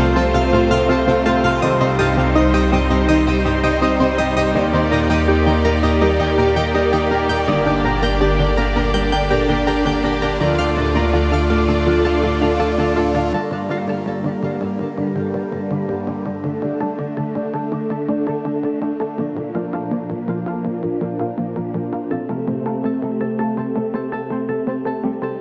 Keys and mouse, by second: 2.0-2.4 middle drag, 2.7 shift+middle drag, 3.2-4.1 middle drag, 4.4-6.4 middle drag, 8.1-8.4 shift+middle drag, 8.7 click, 9.7 shift+click, 10.8 s, 13.5 g, 16.1 click, 17.8 g, 23.1 g, 24.7 click, 25.2-25.4 middle drag.